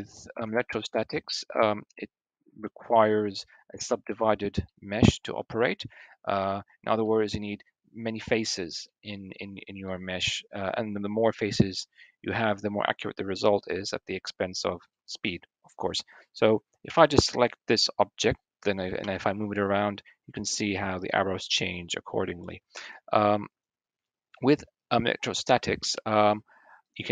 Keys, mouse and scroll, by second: 0.2 Tab, 1.3 click, 1.5 middle click, 1.9 click, 2.3 middle click, 4.4 click, 4.5 middle click, 5.4 middle click, 6.8-8.6 shift+middle drag, 8.6 click, 8.7 middle click, 9.2 middle click, 9.6 middle click, 11.0 click, 11.2 middle click, 11.5-12.6 scroll down 1, 12.6-13.5 scroll down 1, 14.0 middle click, 16.6 l, 18.0-19.1 drag, 18.9 g, 19.4 click, 20.1 middle click, 20.2 click, 20.3 middle click, 20.4 click, 20.6 middle click, 21.3 middle click, 21.7-23.1 middle drag, 25.7 Tab.